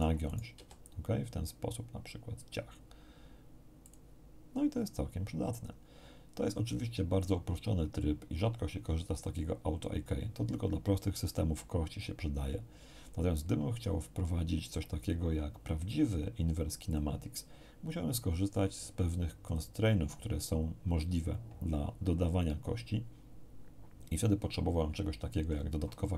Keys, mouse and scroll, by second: 0.5 g, 3.8 click, 16.9 click, 19.4 click.